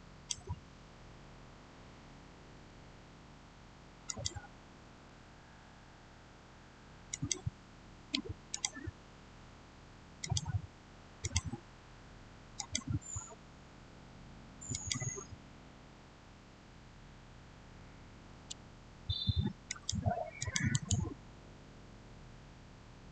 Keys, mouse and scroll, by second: 4.0 click, 6.1-7.0 scroll down 1, 7.0 click, 14.6 click, 19.6 click, 20.6 right click.